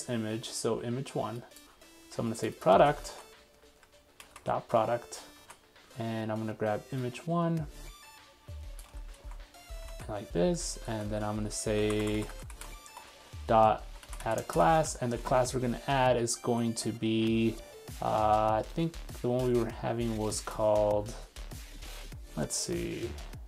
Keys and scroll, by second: 2.7 super+c, 3.1 super+2, 4.5 super+v, 5.4 super+1, 8.9 super+c, 9.2 super+2, 10.0 super+v, 13.9 super+z, 15.3 super+Tab, 16.5 super+3, 22.5 super+2.